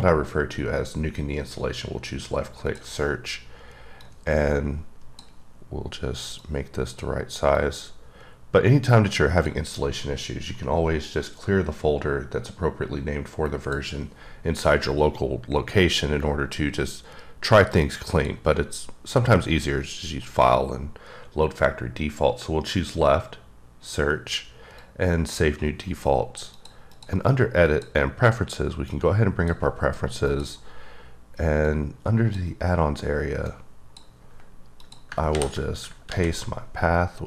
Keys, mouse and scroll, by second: 4.0 click, 6.4 click, 7.5 click, 11.1 click, 17.5 click, 24.7 click, 26.5 click, 27.6 click, 28.9 click, 30.3 click, 31.6 click, 33.4 click, 34.8 click, 35.3 v, 36.1 ctrl+z.